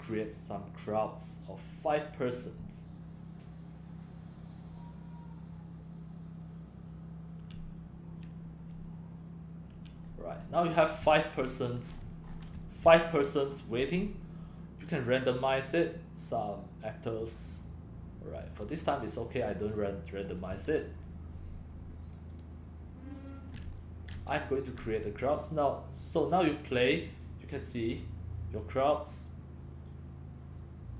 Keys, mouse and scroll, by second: 1.3 click, 1.5 drag, 9.1 drag, 10.1-10.8 scroll down 9, 11.7 click, 12.0-12.4 scroll, 12.6-13.8 typing, 13.7 right click, 14.0 click, 15.6-21.5 drag, 23.2 click, 23.5-25.3 typing, 25.6-26.9 drag, 28.3-28.9 drag, 30.3 click.